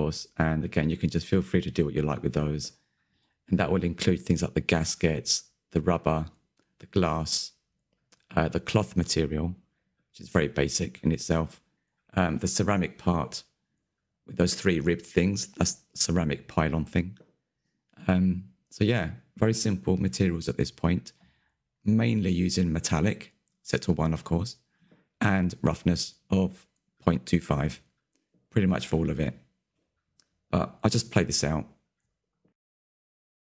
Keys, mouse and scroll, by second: 0.3 click, 2.3-4.1 drag, 4.6 click, 5.3-6.3 shift+middle drag, 6.3 click, 6.7 middle click, 7.6 n, 7.8-8.7 middle drag, 8.7 click, 9.4 click, 9.7-12.3 middle drag, 12.3 click, 13.0 click, 13.5-15.1 middle drag, 15.1 scroll up 4, 15.2 shift+middle click, 15.5 click, 16.1 click, 16.5 scroll down 2, 17.6 click, 18.4-19.4 drag, 19.7 middle click, 20.0 scroll up 2, 20.2-21.5 shift+middle drag, 21.5 click, 22.0 click, 22.4 scroll down 5, 22.7-24.6 shift+middle drag, 24.6 scroll up 1, 24.7 shift+middle click, 24.9 click, 25.1 Tab, 25.4 3, 25.5 a, 25.5 a, 25.8 l, 26.7 Tab, 27.7 click, 28.0 middle click, 28.3-28.7 scroll up 3, 28.7 KP_Decimal, 28.9 Left, 29.3 Tab, 29.6 Left, 29.9-32.0 drag.